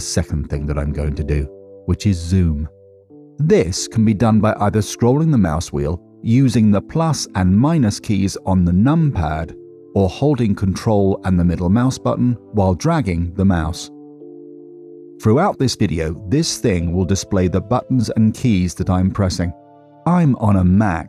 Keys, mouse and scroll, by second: 0.1 middle click, 4.3-5.0 scroll up 9, 5.0-5.6 scroll down 9, 7.9-8.6 KP_Subtract, 9.5-10.2 KP_Add, 11.5 ctrl+middle click, 17.0-18.7 typing.